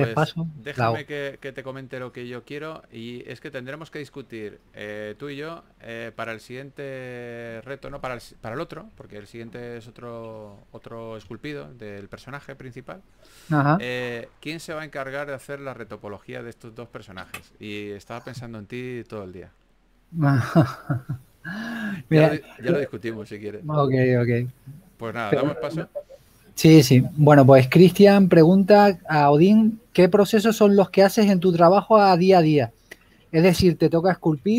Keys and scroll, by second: 10.9 3, 13.7 4, 17.5-17.9 typing, 22.7-23.3 typing.